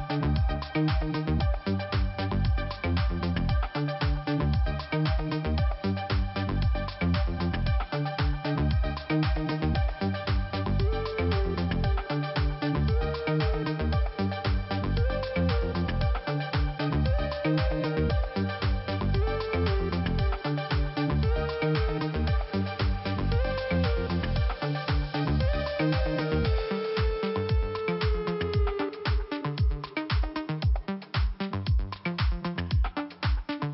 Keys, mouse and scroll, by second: 0.6 click, 0.7 click, 1.7 click, 2.0 click, 2.6 click, 2.7 click, 3.4 click, 6.0 click, 6.0 click, 6.6 click, 8.9 right click, 9.0 right click, 9.8 click, 11.0 click, 12.4 click, 13.3 right click, 14.5 click, 16.9 click, 17.5 click, 18.2 click, 18.4 click, 18.5 click, 19.5 click, 19.6 click, 20.4 click, 22.5 middle click, 25.5 click, 25.6 click, 26.3 click, 29.7 click, 29.8 click, 31.0 click, 31.1 click, 31.5 click, 32.5 click.